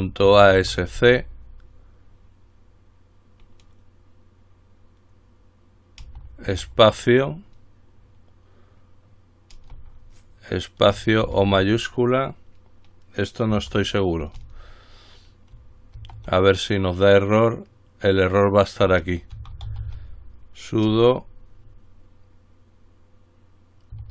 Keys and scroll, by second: 0.0-1.7 typing, 21.1 typing.